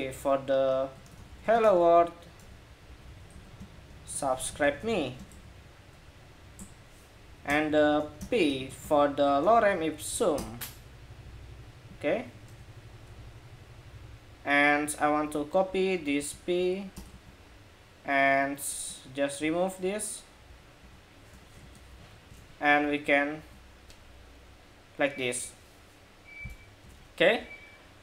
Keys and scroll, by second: 16.0 super+c, 16.8 super+v, 21.7 super+s, 22.6 super+r, 26.6 super+Tab.